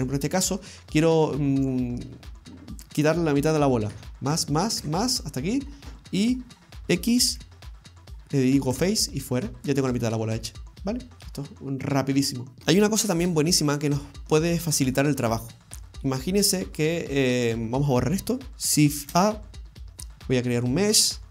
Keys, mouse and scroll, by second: 0.0 middle click, 0.0 scroll down 2, 4.0 ctrl+KP_Add, 4.3 ctrl+KP_Add, 4.9 ctrl+KP_Add, 5.4-6.2 scroll down 3, 5.7 middle click, 7.3 x, 9.8 middle click, 13.5 scroll up 1, 13.7-14.3 scroll down 3, 14.1 middle click, 15.0 shift+middle click, 15.5-16.0 scroll up 4, 16.1 shift+middle click, 16.6 scroll up 2, 17.0 middle click, 18.5 Tab, 18.5 click, 18.5-19.0 scroll down 3, 18.5 a, 18.5 x, 19.1 shift+a.